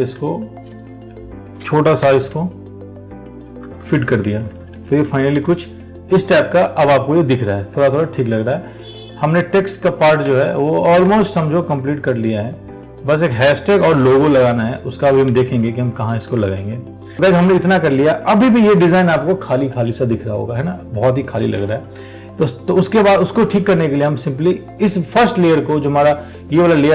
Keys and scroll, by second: 0.4 ctrl+t, 11.3 ctrl+t.